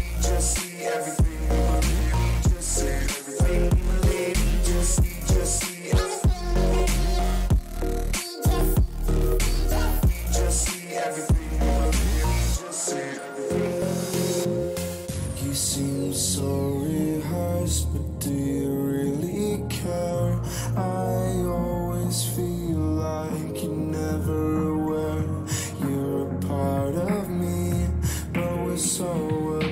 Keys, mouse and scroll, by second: 2.2 a, 2.8-5.2 right drag, 3.5-5.4 drag, 5.8 a, 6.4-8.6 right drag, 7.4-9.2 drag, 10.1 a, 11.4-12.9 right drag, 12.5 click, 13.2-14.4 drag, 16.0 a, 16.6-19.0 middle drag, 18.3 a, 18.6 a, 19.0-20.8 right drag, 19.8-21.6 drag, 26.4 a, 27.2-29.1 right drag, 28.1-29.7 drag.